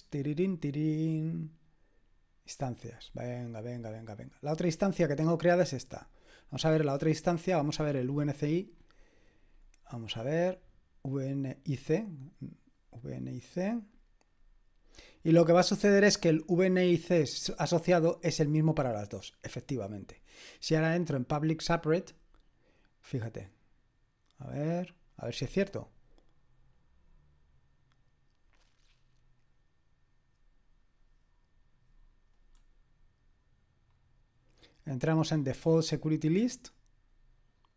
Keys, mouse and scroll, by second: 5.1 click, 8.7-10.8 scroll down 2, 11.1 click, 17.4-22.0 scroll down 2, 22.0 click, 32.5-33.4 scroll down 2, 33.9-35.9 scroll down 2, 35.9 click.